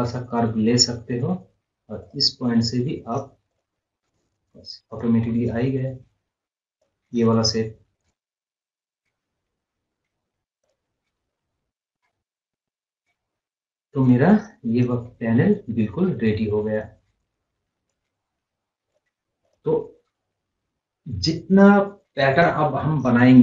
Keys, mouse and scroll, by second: 4.5-5.0 scroll up 1, 5.0 click, 5.3 scroll up 1, 6.8 click, 7.6 scroll up 1, 8.0-8.4 scroll down 1, 9.5-9.9 scroll up 1, 9.9 scroll down 1, 10.7 click, 11.2 scroll up 1, 12.2 scroll down 1, 13.3-13.7 scroll up 1, 14.1-18.4 drag, 18.4 right click, 18.9 click.